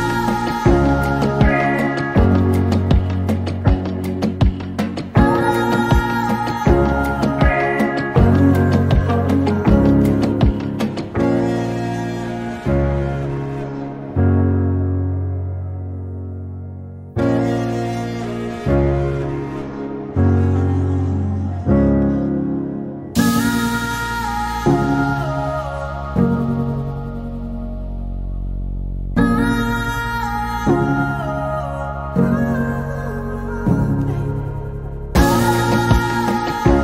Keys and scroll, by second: 6.6-7.7 typing, 10.7 typing, 26.5-27.8 typing.